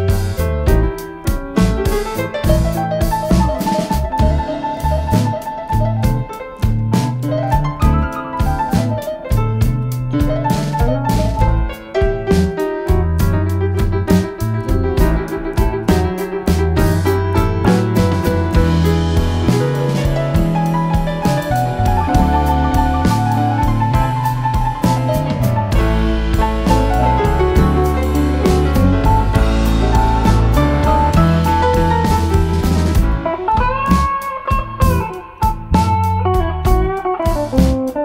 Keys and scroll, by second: 3.8 ctrl+g, 4.4 End, 6.6 F7, 6.7 F1, 7.0-8.3 typing, 9.7 typing, 12.8 Delete, 13.4 space, 14.9 F1, 15.2-15.6 typing, 16.1 ctrl+d, 19.9 typing, 28.5-28.9 typing, 30.5-32.8 typing, 34.3 shift+F6.